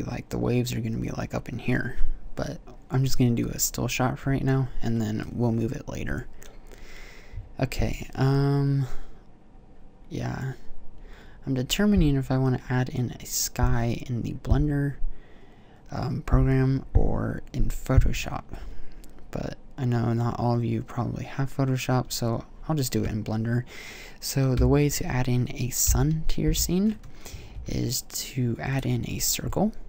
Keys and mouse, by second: 24.3 2, 25.6 KP_7, 26.3 KP_5, 27.3 shift+a, 29.7 t.